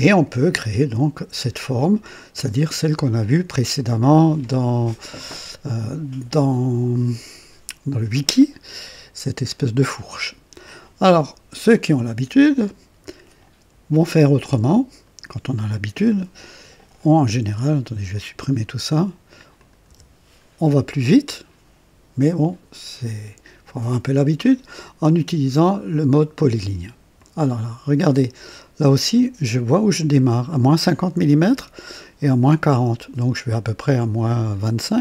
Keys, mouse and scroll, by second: 15.0 right click, 16.4 click, 17.3 Delete, 18.1 click, 19.6 click, 19.9 Delete, 27.2 click.